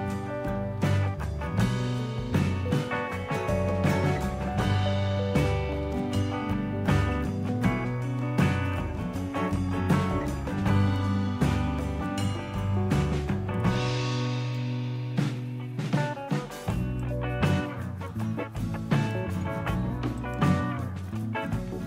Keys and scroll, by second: 0.5-1.7 typing, 5.6 Return.